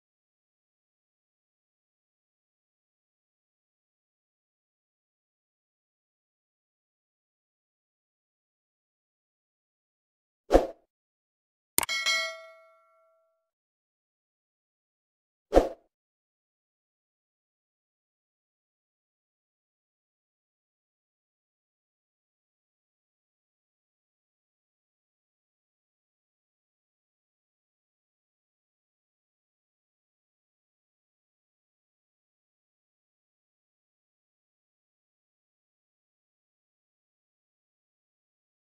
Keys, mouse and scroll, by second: 1.7 q, 3.6-5.9 scroll down 10, 5.9-9.0 middle drag, 15.4 click, 16.8-19.8 middle drag, 20.7-23.8 drag, 24.4-29.9 drag, 30.5-31.1 scroll down 1, 31.1-34.2 middle drag.